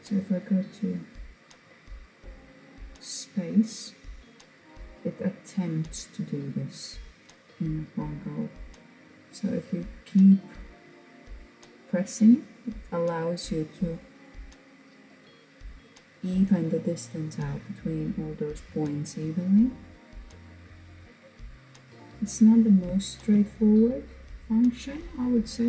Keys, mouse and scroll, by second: 8.7-13.5 drag, 18.8-19.2 scroll down 1, 19.2-22.6 middle drag, 22.6-23.3 scroll down 5, 23.3-24.0 middle drag, 24.0 drag, 25.1-25.6 shift+middle drag.